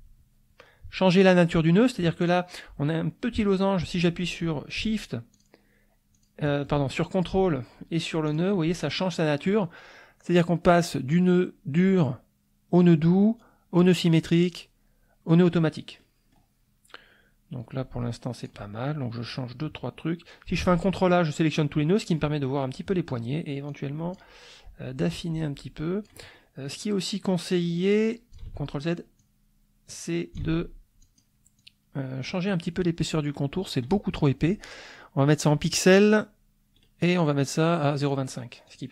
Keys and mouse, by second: 2.2 click, 5.3 shift+click, 6.1 shift+click, 8.3 ctrl+click, 16.0 click, 18.4 ctrl+click, 20.6 ctrl+a, 23.7 click, 25.1-26.2 drag, 26.3 middle click, 27.5-28.5 drag, 28.4 ctrl+z, 29.1-30.5 drag, 30.4 ctrl+z, 31.0 ctrl+click, 31.6 click, 35.4 click, 36.8 right click, 38.0 click, 38.6 click.